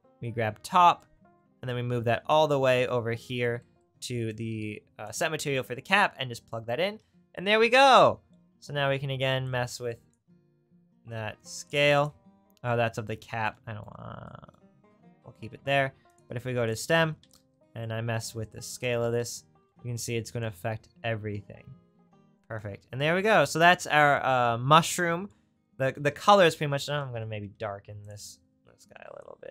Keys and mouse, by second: 0.3 middle click, 1.7-2.7 middle drag, 12.1-16.1 drag, 28.2-29.5 drag.